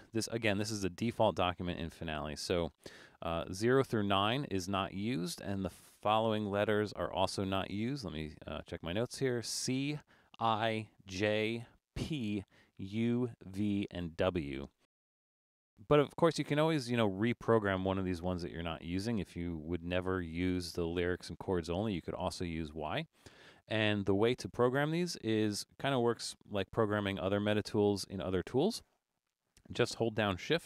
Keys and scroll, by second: 26.7 super+=.